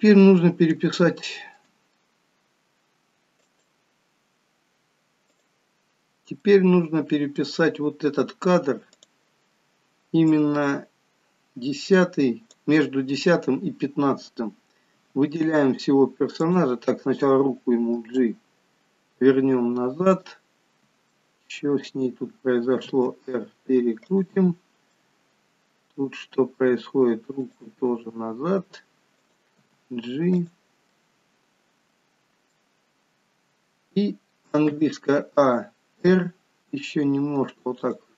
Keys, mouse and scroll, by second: 0.0-1.1 scroll up 2.